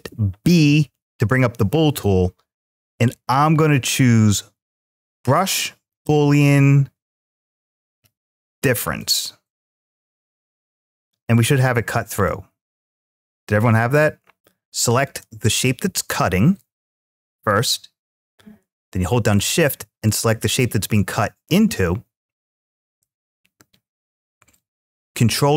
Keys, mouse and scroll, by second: 8.8-11.8 middle drag, 12.1-14.4 middle drag, 14.9-16.0 drag, 19.2-19.8 shift+drag, 25.4 ctrl+shift+b.